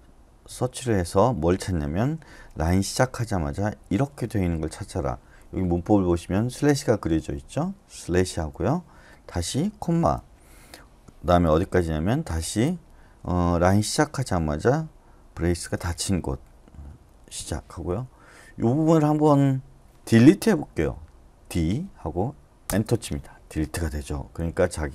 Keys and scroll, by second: 0.5 /, 2.5 ^, 3.8 {, 8.4 /, 10.0 ,, 12.4 /, 13.7 ^, 15.4 }, 17.4 /, 21.4 d, 22.6 Return, 24.4 u.